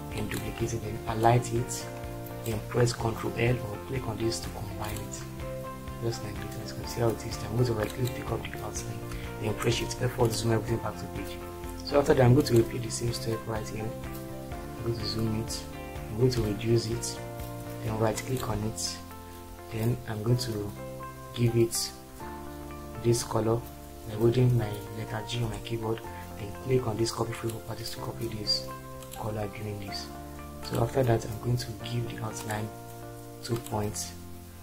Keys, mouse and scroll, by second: 9.7 shift+F4.